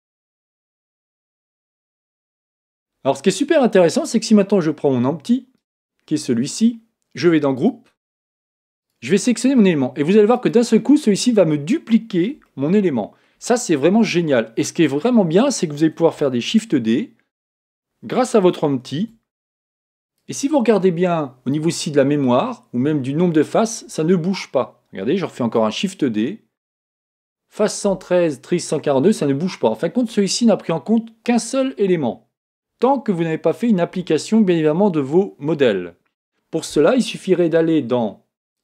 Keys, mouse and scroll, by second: 5.5-7.5 right drag, 7.5-10.5 drag, 12.4-14.3 middle drag, 14.9-16.5 scroll down 1, 16.5 scroll down 1, 16.5 shift+d, 18.8 shift+d, 20.3 click, 25.4 shift+d.